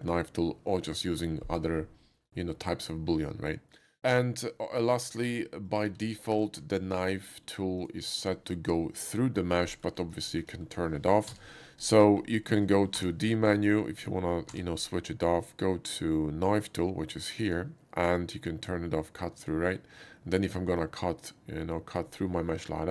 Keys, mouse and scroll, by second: 2.5-3.7 middle drag, 4.3 shift+middle click, 4.9 shift+middle click, 5.7 shift+click, 5.9 x, 6.0 click, 6.5 shift+a, 7.8 click, 9.7 middle click, 10.0 alt+middle click, 10.3 alt+middle click, 11.3 d, 12.1 middle click, 12.4 shift+middle click, 12.9 d, 13.5 right click, 17.5 click, 19.4 click, 20.8-22.0 drag.